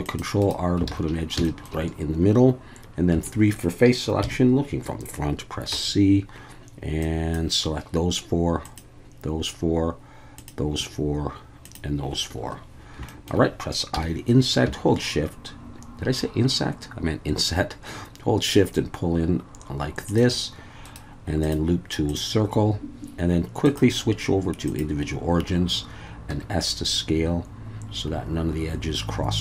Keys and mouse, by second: 0.4-0.8 drag, 0.9 alt+a, 1.5 shift+middle click, 3.1 3, 4.2 KP_1, 5.7 c, 8.6 click, 10.4 click, 11.6 click, 12.4 Escape, 13.1 shift+middle click, 14.0 i, 20.1 shift+click, 20.9-22.2 drag, 23.6-24.8 drag, 26.3 s.